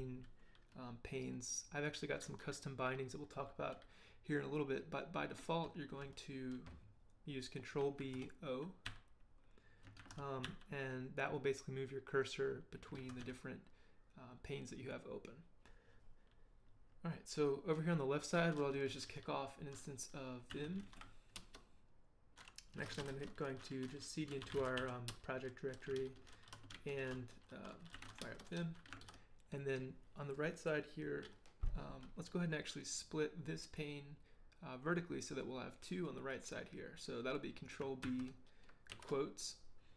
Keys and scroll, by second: 8.0 ctrl+b, 8.9 o, 10.0 ctrl+b, 10.4 o, 12.9 ctrl+b, 13.2 o, 20.2-21.3 typing, 21.4 Return, 22.7-25.3 typing, 26.0 ctrl+l, 26.7 ctrl+l, 27.7-28.5 typing, 29.0 ctrl+l, 38.0 ctrl+b, 38.9 shift+'.